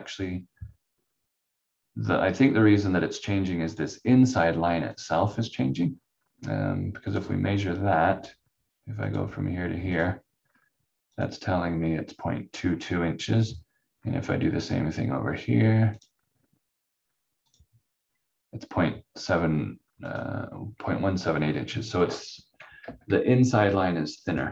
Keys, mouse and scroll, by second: 3.7 click, 5.7 scroll up 1, 7.0 click, 7.4-7.9 scroll up 1, 9.0 click, 12.6-13.0 scroll down 1, 13.9-15.9 scroll up 1, 15.9 click, 21.2-22.8 scroll down 1, 22.8 Delete, 24.3 click.